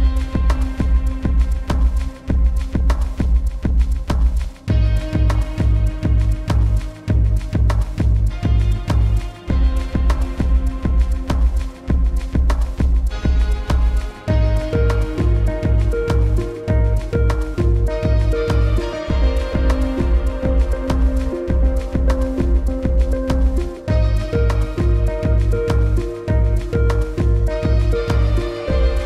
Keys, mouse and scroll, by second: 1.0 click, 1.7-2.1 alt+scroll down 2, 2.1 click, 2.7 click, 4.4 click, 8.3 click, 10.4 click, 13.0 right click, 14.6 click, 15.5 right click, 16.2 click, 17.0 scroll down 1, 17.6 v, 18.0 click, 18.3-18.7 alt+scroll up 2, 19.1 click, 23.2 click, 23.8 x, 24.7 click, 27.8-28.2 alt+scroll up 2, 28.5 click.